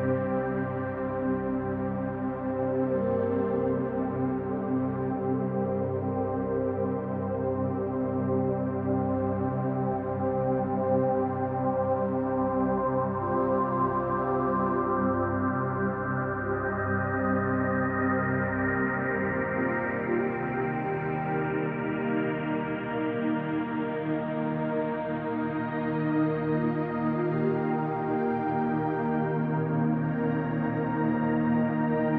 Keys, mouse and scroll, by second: 0.9-2.7 drag, 2.7 b, 4.8 click, 5.6 scroll down 1, 5.8-11.2 shift+middle drag, 6.6 z, 7.2 scroll down 1, 7.7-9.2 scroll down 6, 8.3 Tab, 9.2 ctrl+s, 9.6-9.9 scroll up 2, 10.7 Tab, 11.2 click, 11.4 middle click, 12.0 click, 13.0 middle click, 13.4-14.6 drag, 16.2 click, 18.0-19.7 middle drag, 18.8 scroll up 1, 19.7 click, 20.2 click, 21.3 click, 23.6 click, 25.2 click, 26.6 scroll down 2, 26.7-32.1 middle drag, 27.4 Tab, 27.5-28.6 scroll down 6, 30.0 scroll up 1, 30.5 scroll down 1, 31.2 ctrl+s, 31.6-32.1 scroll up 2.